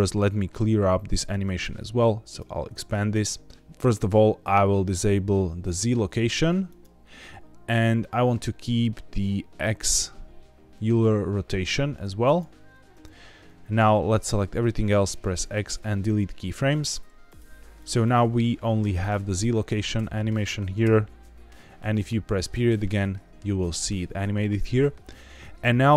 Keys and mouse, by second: 2.2 click, 6.6 click, 12.1 click, 13.7 a, 14.9 x, 17.2 click, 17.7 click, 17.9 click, 18.9 click, 19.9 a, 20.7 KP_Decimal, 22.8 middle click.